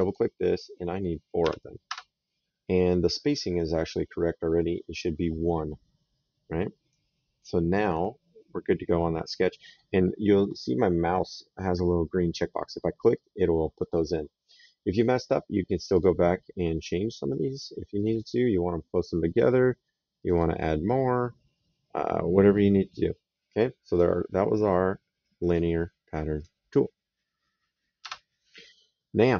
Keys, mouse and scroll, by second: 1.1 KP_4, 1.6 Return, 4.9 right click, 12.9 click, 15.5 click, 17.7 click, 19.9 click, 23.7 click, 24.4 right click, 26.1 click, 27.7 Return.